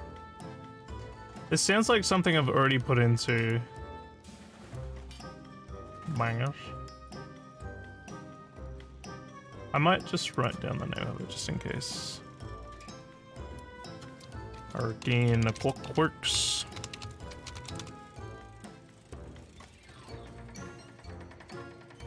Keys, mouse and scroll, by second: 1.7 click, 3.4 click, 4.6 click, 8.1 click, 10.3 click, 13.5 click, 14.3-18.3 typing.